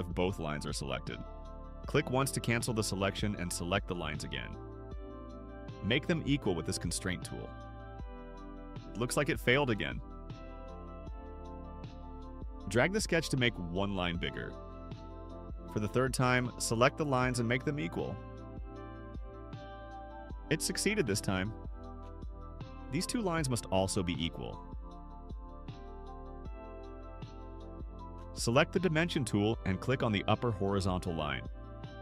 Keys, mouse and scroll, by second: 2.2 click, 3.0 click, 4.2 click, 8.4 click, 10.5 right click, 12.3 click, 13.2 click, 14.2 click, 14.6 scroll up 1, 14.7 middle click, 15.5 click, 16.4 click, 20.0 click, 22.4 click, 23.3 click, 26.4 click, 31.1 click.